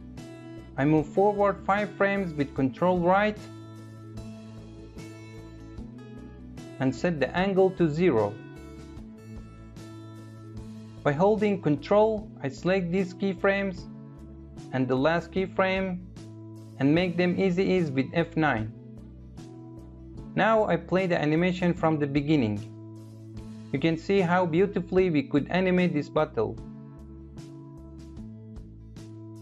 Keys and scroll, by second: 1.0 ctrl+Right, 16.6 F9, 20.1 space.